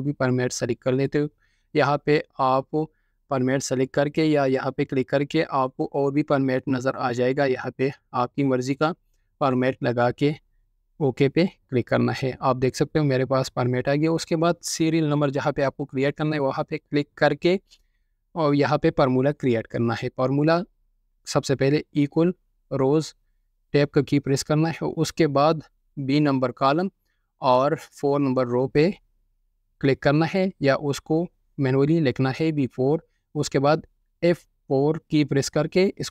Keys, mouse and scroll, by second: 20.9-23.0 typing, 23.9 Tab, 24.7 typing, 25.7 typing, 32.1-32.6 typing, 35.8 F4.